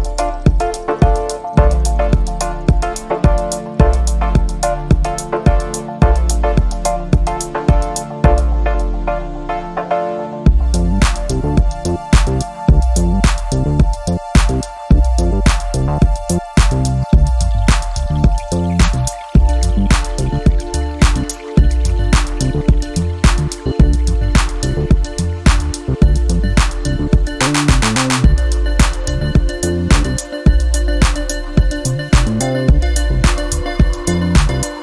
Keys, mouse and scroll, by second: 0.8 BackSpace, 1.0 5, 2.6 click, 2.9-4.6 drag, 6.4 click, 7.1 click, 7.9 ctrl+click, 9.7 click, 11.9 click, 12.8 click, 14.5 click, 15.7 click, 17.8 click, 19.7 click, 21.7 click, 25.5 click, 27.7 click, 28.4-29.4 typing, 30.4 click, 32.2 click, 33.8 click.